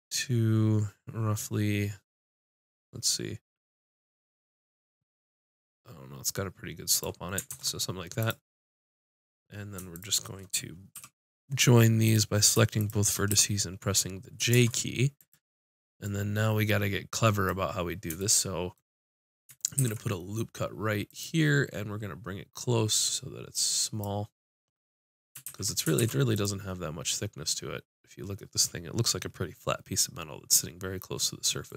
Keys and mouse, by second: 7.5 ctrl+Tab, 9.0 click, 10.9 j, 13.3 j, 14.5 ctrl+Tab, 19.7 ctrl+r, 24.4 middle click, 25.4 ctrl+z, 26.0 ctrl+r, 26.8-28.9 drag.